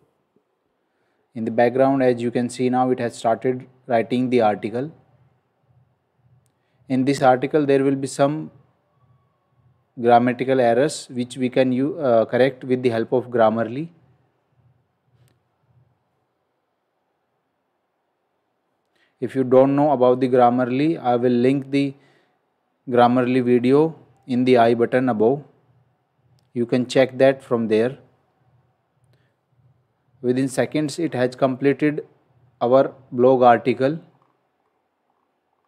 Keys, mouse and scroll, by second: 31.0 scroll up 1, 33.6 scroll down 1.